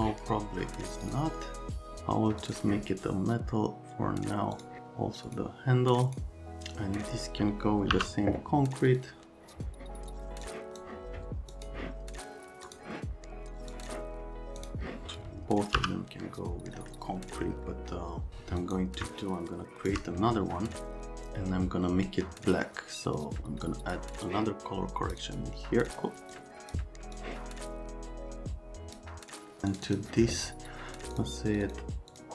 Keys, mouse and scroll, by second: 1.1 click, 2.4 click, 4.6 click, 5.3 click, 6.1 click, 6.4 click, 8.0 b, 8.9 click, 10.5 click, 11.5 click, 12.7 click, 13.7 click, 14.6 click, 15.8 m, 16.8 right click, 18.6 click, 19.1 shift+click, 20.6 right click, 23.1 click, 23.7 click, 24.3 click, 25.2 click, 25.9 click, 26.3 click, 27.2 click, 29.7 click, 29.9 click, 31.2 click, 31.5 click, 31.7 click, 32.1 click.